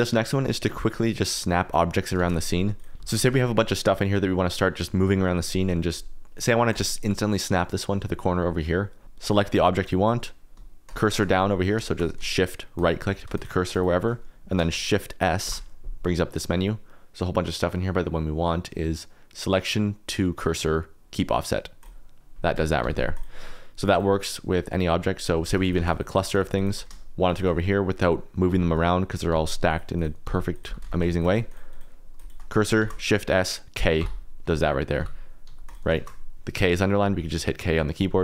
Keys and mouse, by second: 2.1-3.3 typing, 3.8 click, 4.3 middle click, 9.2 click, 9.5 click, 9.8 click, 10.8 shift+click, 12.7 shift+click, 13.3 shift+click, 13.7 shift+click, 15.4 shift+s, 22.8 g, 22.9 z, 23.1 right click, 23.9 right click, 24.2 right click, 25.4 shift+d, 25.6 right click, 25.7 shift+d, 26.3 shift+click, 26.5 shift+click, 27.2 shift+click, 28.6 shift+click, 29.1 click, 29.3 g, 29.9 click, 30.2 g, 30.5 click, 30.6 g, 30.9 shift+z, 31.1 shift+click, 31.4 shift+click, 31.7 shift+click, 32.8 shift+s, 34.9 g, 35.4 z, 35.6 click, 35.9 shift+s.